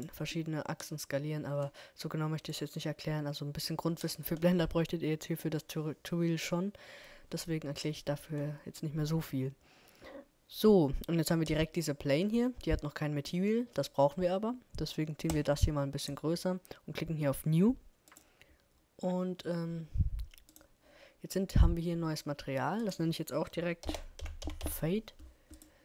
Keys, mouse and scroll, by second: 0.6-2.5 drag, 14.1-16.0 drag, 17.1-18.8 drag, 18.8-21.0 middle drag, 19.7-21.5 drag, 22.6-24.2 drag.